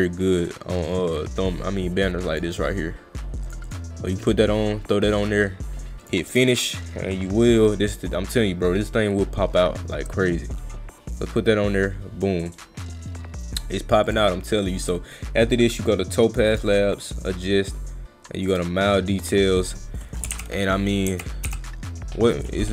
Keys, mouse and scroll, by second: 0.9-2.4 drag, 3.5 click, 3.7 click, 6.0 click, 14.1 click, 16.6 click, 18.5 click.